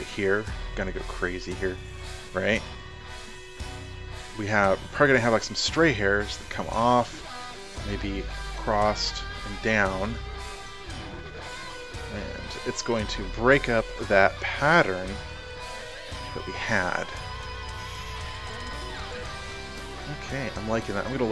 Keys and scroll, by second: 3.4 ctrl+alt+z.